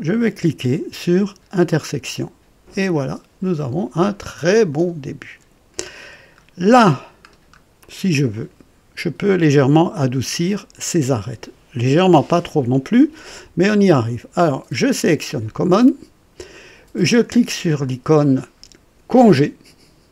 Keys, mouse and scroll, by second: 1.6 click, 2.9-6.2 drag, 6.4-6.7 scroll up 2, 7.3-7.6 scroll down 2, 7.8-9.5 drag, 15.2 click, 19.1 click.